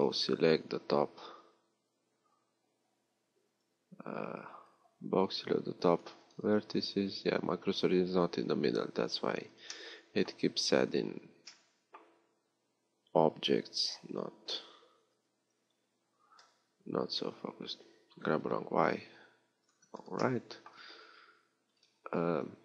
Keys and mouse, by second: 0.4 a, 4.3 b, 6.2-10.9 drag, 15.1 g.